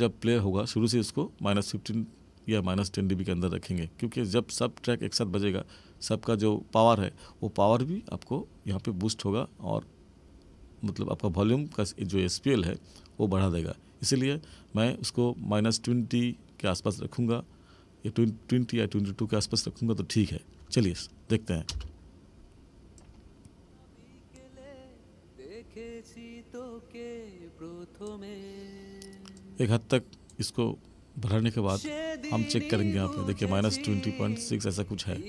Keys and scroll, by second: 21.6 space.